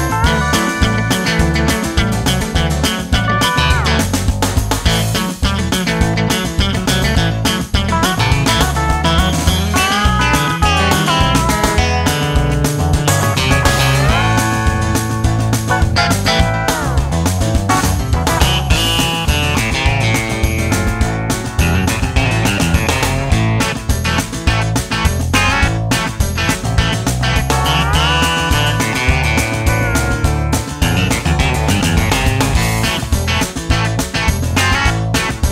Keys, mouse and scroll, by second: 0.8-2.6 drag, 3.4 g, 6.3 n, 7.4-10.1 drag, 11.2 g, 11.9-15.7 drag, 12.4 s, 15.1-18.0 typing, 20.0-21.7 drag, 22.0 g, 24.1-27.2 drag, 27.9-29.8 drag, 29.8-32.0 middle drag.